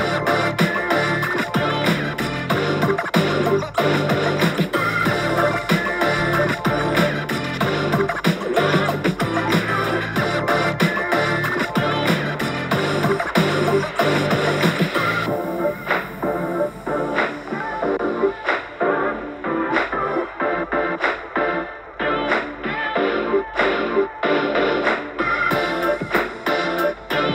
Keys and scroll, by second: 21.2 b.